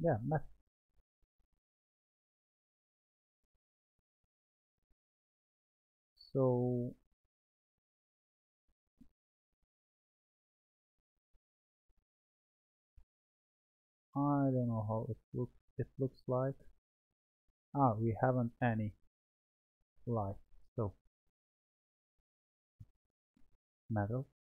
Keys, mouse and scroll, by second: 3.7-5.0 drag, 5.0-8.1 scroll down 2, 8.4-11.4 drag, 12.9 click, 13.4-15.9 middle drag, 15.9 click, 16.6-19.8 middle drag, 20.7 click, 21.7 click, 22.8-24.4 drag.